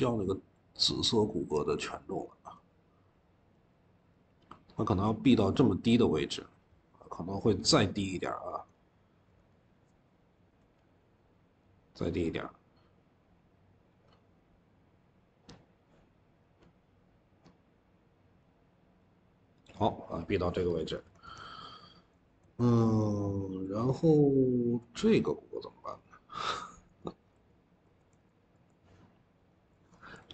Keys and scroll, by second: 7.3 Escape, 7.4 Escape, 7.5 Escape, 8.2 Escape, 9.1 Escape, 20.6 Escape, 20.9 Escape, 21.1 Escape, 23.9-28.0 typing, 29.8 ctrl+s, 30.1 typing.